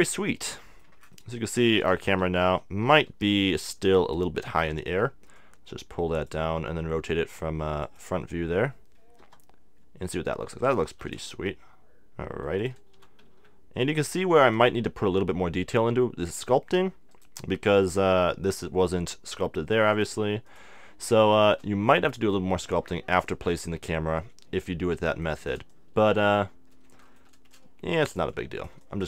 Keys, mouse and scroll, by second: 0.4-2.0 middle drag, 2.0 KP_3, 2.6 KP_1, 3.1 KP_5, 3.7-5.2 middle drag, 5.4-7.3 drag, 5.4 middle click, 7.0 r, 7.9-9.8 drag, 9.2 KP_0, 9.8-12.3 middle drag, 10.9 r, 12.7-15.1 drag, 12.9 g, 15.1 middle click, 15.4 click, 16.3-18.1 drag, 17.1-19.0 right drag, 19.9-21.7 drag, 21.3 middle click, 21.7-23.4 middle drag, 23.4-25.2 drag, 23.4 right click, 25.3 middle click, 25.7-29.0 drag, 25.7-28.6 right drag.